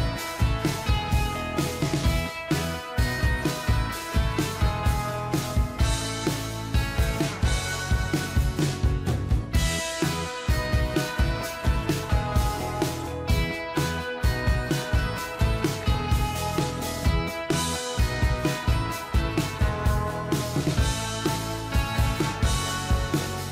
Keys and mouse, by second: 4.9 ctrl+click, 13.7 click.